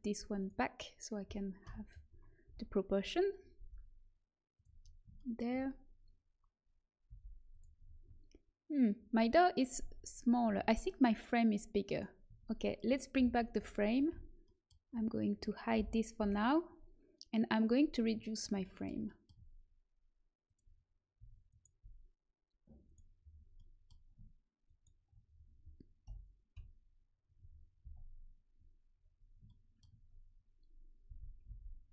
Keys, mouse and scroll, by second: 0.3-2.1 drag, 1.6 KP_1, 2.4 z, 3.5 g, 7.0 g, 9.7 a, 10.4 Tab, 11.8-13.3 drag, 12.2 Tab, 13.1 alt+h, 13.5 a, 14.0 z, 15.7 l, 16.1 h, 18.3-19.9 middle drag, 20.4-22.8 drag, 21.4-25.2 right drag, 23.5-25.2 middle drag, 26.5 KP_1, 27.7 z, 31.0 s.